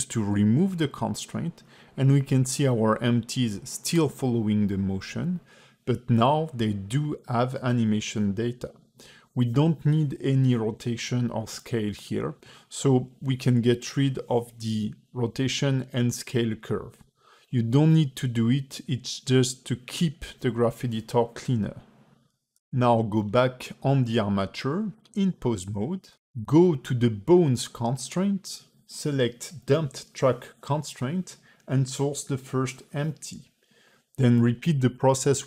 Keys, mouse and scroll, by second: 4.9 space, 5.3 click, 7.4 click, 8.5 click, 9.0 click, 9.4 click, 10.7 x, 11.4 ctrl+z, 11.9 click, 12.3 click, 13.2 x, 14.0 click, 14.9 click, 15.8 shift+click, 16.3 click, 16.6 click, 17.0 click, 17.3 click, 17.7 x, 18.4-19.5 scroll up 3, 19.5 click, 20.0 ctrl+Tab, 20.2 click, 28.6 click, 29.5 click, 31.9 click, 34.0 click.